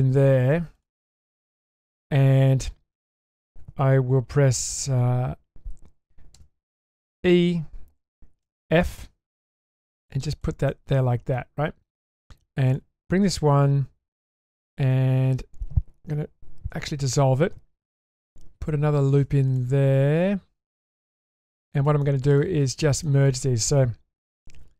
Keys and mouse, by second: 16.7 ctrl+x, 18.9 ctrl+r.